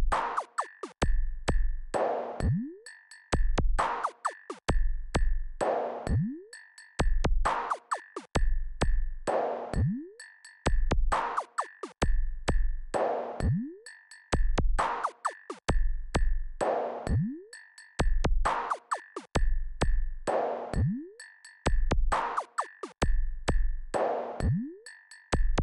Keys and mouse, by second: 3.0-7.1 drag, 12.2-12.6 ctrl+KP_4, 12.7 ctrl+KP_4, 12.8 ctrl+KP_4, 17.5-21.5 drag, 23.0 KP_8, 23.2 KP_8, 24.4-25.6 drag.